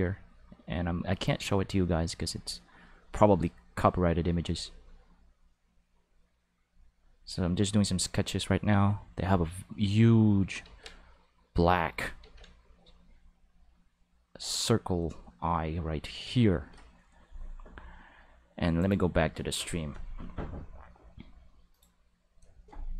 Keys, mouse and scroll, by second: 0.3 click, 0.9 click, 1.3 click, 2.5 click, 3.4 click, 4.1 click, 4.9 click, 5.6 click, 6.1 click, 7.0 click, 8.5 click, 9.6 click, 10.8-12.0 drag, 12.3 ctrl+z, 12.3 ctrl+click, 13.5-14.7 drag, 15.3-16.4 drag, 18.8 click, 21.7 click.